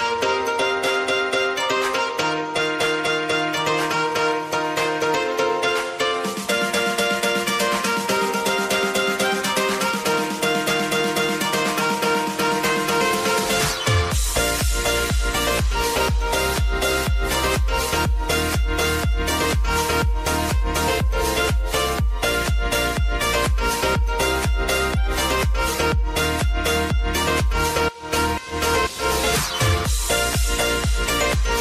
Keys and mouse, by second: 0.0 v, 0.9-16.1 drag, 17.0 click, 19.6 ctrl+c, 20.1 ctrl+v, 21.6 -, 22.8-26.9 drag, 26.9 space.